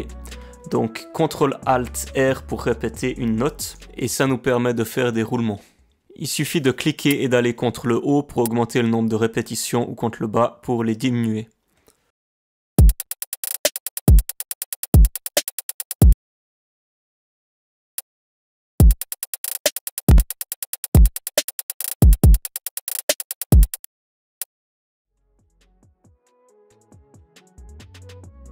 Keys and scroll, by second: 12.7 space, 16.1 space, 18.7 space.